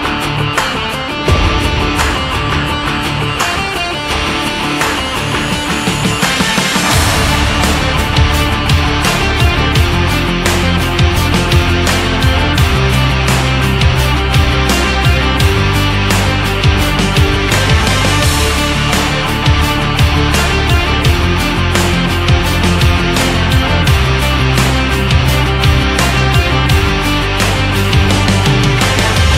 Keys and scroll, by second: 2.4 Down, 5.2 Up, 28.4 ctrl+s.